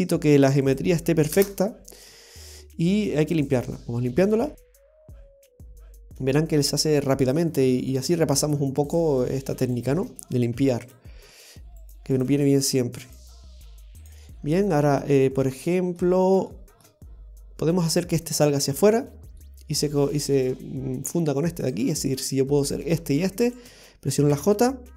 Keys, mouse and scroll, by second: 1.9-2.3 scroll up 1, 2.3 scroll down 1, 2.4-2.8 scroll down 2, 2.6 middle click, 3.3 right click, 4.4 Tab, 5.6 Tab, 6.2 shift+middle click, 6.7-7.2 scroll up 2, 7.0 middle click, 7.7 shift+middle click, 8.9 click, 9.7 right click, 10.6 x, 11.8 right click, 12.0 x, 13.1 right click, 13.2 x, 14.4-16.0 scroll down 2, 14.7 middle click, 16.1 scroll down 1, 16.5 shift+middle click, 17.1-17.4 scroll up 1, 17.7 scroll up 1, 19.1 scroll up 2, 19.4 middle click, 20.0 shift+middle click, 21.6 click, 22.6 right click, 23.4 shift+right click, 24.3 i.